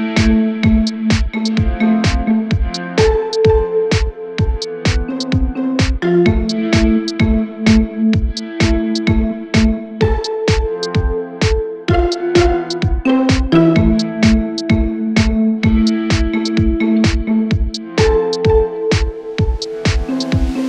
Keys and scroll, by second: 3.2 Escape, 4.5 f, 10.1 4, 14.5 2, 18.1 4, 20.4 2.